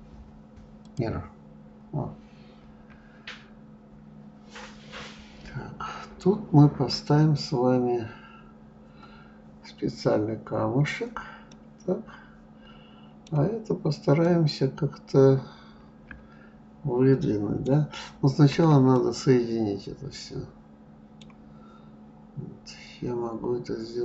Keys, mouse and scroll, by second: 3.1-4.0 scroll up 3, 4.0-4.6 scroll down 2, 8.5 scroll down 1, 11.9-17.7 middle drag, 18.5-19.4 scroll up 4, 19.4-22.3 middle drag, 22.3-23.4 scroll up 2, 23.4-24.0 scroll down 2.